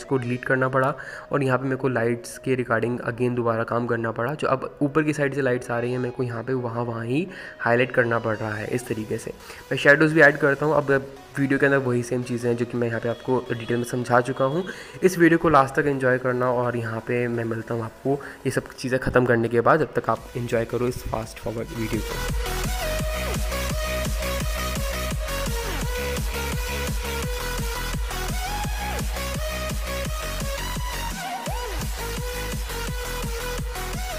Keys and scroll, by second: 0.0 ctrl+z, 2.5 x, 3.2 ctrl+z, 4.3 x, 5.4 x, 5.9 ctrl+alt+KP_0, 7.0 ctrl+KP_0, 11.0 [, 11.2 x, 12.3 x, 14.0 ctrl+z, 14.6 ctrl+z, 15.2 ctrl+z, 15.8 ctrl+z, 16.6 ctrl+z, 16.7 ], 17.0 ctrl+z, 17.7 ctrl+KP_0, 18.1 ], 19.6-20.5 typing, 21.0 ctrl+z, 21.5 ctrl+z, 21.9 x, 22.4 ctrl+z, 22.5 ctrl+z, 23.1 ], 23.2 ], 23.5 [, 25.3 [, 26.4 x, 26.6 ctrl+z, 26.8 ctrl+z, 27.8 x, 29.0 ctrl+z, 29.1 ctrl+z, 29.3 ctrl+KP_0, 32.5 ctrl+z, 33.4 x, 33.7 x.